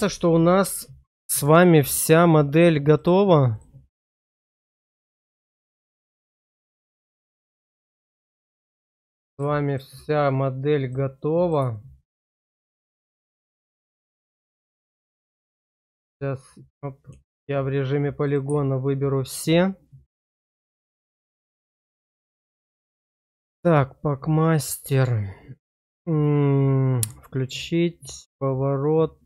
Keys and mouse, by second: 2.9 click, 3.5 click, 6.8-8.2 middle drag, 8.5 shift+middle click, 8.9 middle click, 10.4 middle click, 11.2 middle click, 11.7 shift+middle click, 12.5 middle click, 13.4 click, 20.1 middle click, 20.9 click, 22.9 click.